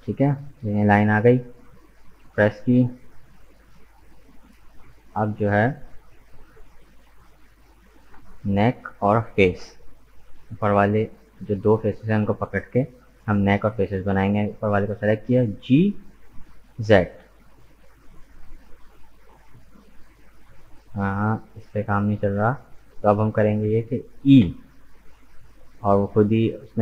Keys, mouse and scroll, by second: 3.3 right click, 3.8-6.2 middle drag, 6.2-7.2 drag, 7.2 right click, 7.6-8.7 middle drag, 8.7 shift+right click, 9.5 KP_1, 15.7 g, 24.4 e.